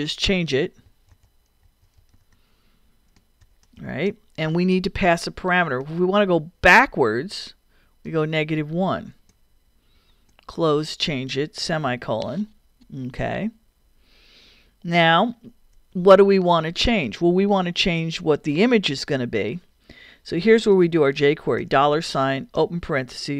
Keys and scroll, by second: 0.6-4.5 typing, 8.1 -, 8.8 |, 9.3 shift+i, 11.9 ;, 15.7 Return, 21.6 shift+4, 22.6 shift+9.